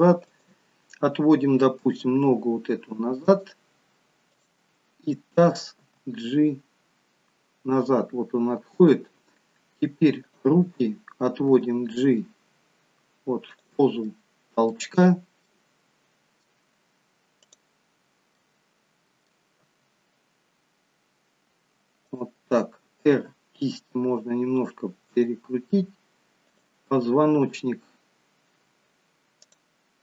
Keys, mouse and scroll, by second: 0.3 click, 1.8 g, 4.3 click, 5.8 g, 10.2 click, 11.8 g, 14.1 middle click, 15.5 middle click, 17.4 click, 18.7 middle click, 19.9 g, 23.1 r, 26.5 click, 29.5 click.